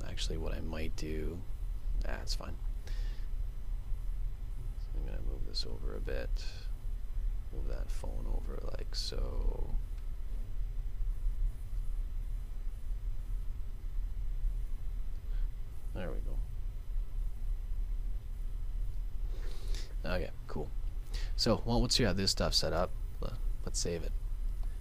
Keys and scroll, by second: 10.3 super+z, 22.7 super+s.